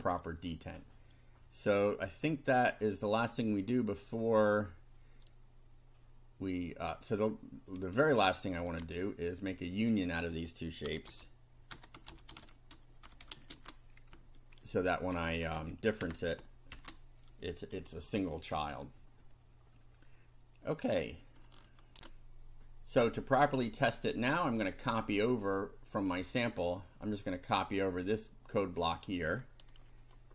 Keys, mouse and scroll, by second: 2.3-3.0 drag, 3.5 click, 7.3-8.7 drag, 8.8 Tab, 9.8 click, 10.6-14.1 typing, 14.2 shift+Down, 16.0 Return, 16.7 shift+], 18.5 F5, 22.0 ctrl+r, 26.0 click, 28.6 click, 30.0 ctrl+click.